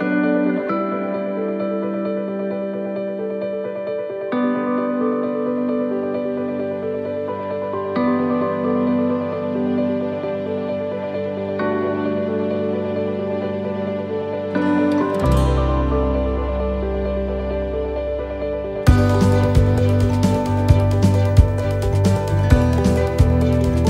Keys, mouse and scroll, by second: 0.2 click, 1.4 middle click, 3.3 click, 5.1 middle click, 5.7 shift+middle click, 6.0-6.4 scroll up 5, 6.4 middle click, 7.2 shift+middle click, 8.6 click, 10.3 middle click, 11.1 shift+middle click, 11.6-11.9 scroll down 2, 11.9 middle click, 12.7 click, 14.3 middle click, 16.6 right click, 17.7 l, 19.3 click, 21.6 right click, 22.4 l, 23.7 click.